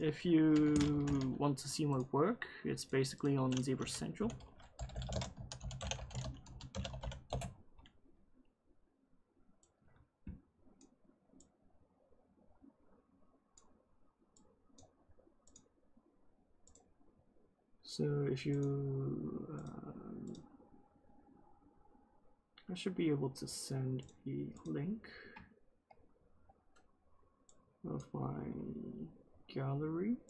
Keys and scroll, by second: 3.7-7.4 typing.